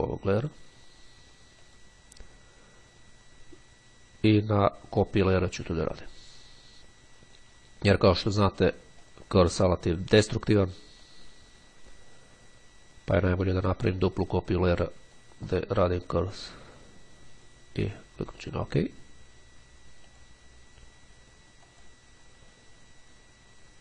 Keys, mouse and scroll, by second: 1.6 click, 5.2 click, 7.9 click, 9.2 click, 11.1-12.6 drag, 13.3-15.9 drag, 16.8-18.1 drag, 21.9 click.